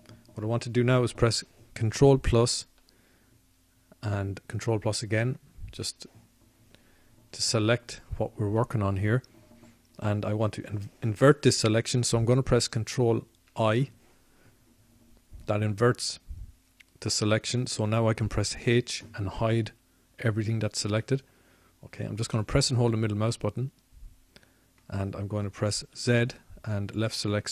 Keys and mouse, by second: 0.6 click, 6.5 ctrl+KP_Add, 8.8 ctrl+KP_Add, 16.7 ctrl+i, 22.1 h.